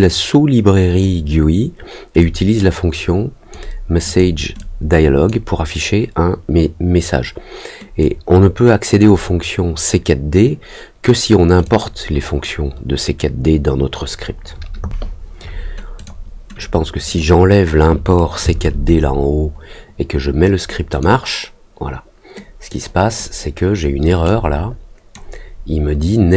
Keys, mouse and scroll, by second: 2.1-3.5 drag, 4.0 click, 4.5 click, 7.9-8.9 drag, 11.6 click, 15.9 click, 16.5 click, 20.8 click, 22.6 click, 24.2 click.